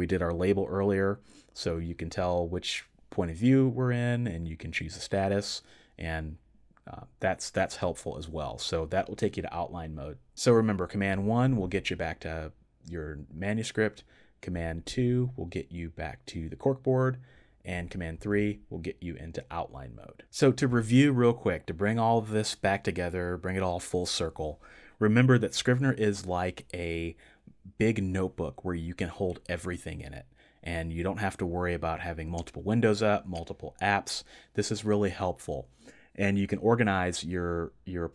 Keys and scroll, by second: 11.3 super+1, 14.7 super+2, 18.0 super+3.